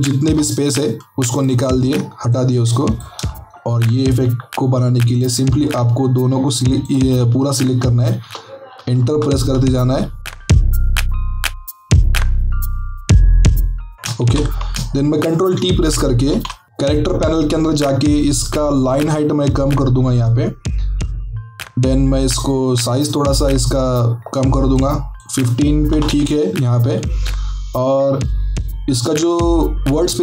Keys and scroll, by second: 8.2 Return, 9.0 Right, 9.3 Right, 10.8 Left, 10.9 Left, 11.1 BackSpace, 11.4 Right, 12.4 Return, 12.7 Right, 12.8 Right, 13.0 Right, 13.1 Right, 13.3 Return, 13.9 Right, 14.7 Right, 25.9 KP_1, 26.0 KP_5.